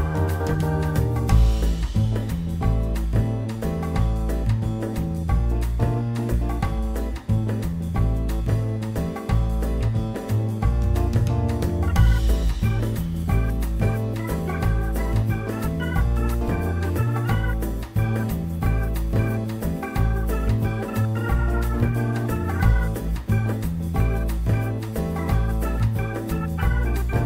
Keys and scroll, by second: 10.9 ctrl+z, 14.8 2, 16.1 ctrl+alt+e, 18.2 F4, 19.4 F4, 25.7 ctrl+z, 27.0 2.